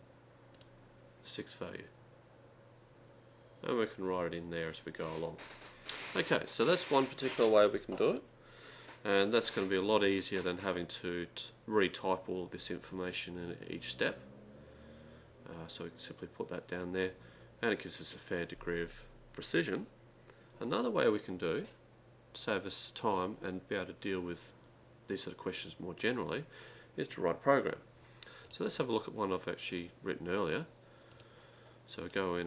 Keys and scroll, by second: 0.5-1.2 typing, 28.4 Down, 28.6 Left, 31.9-32.4 typing.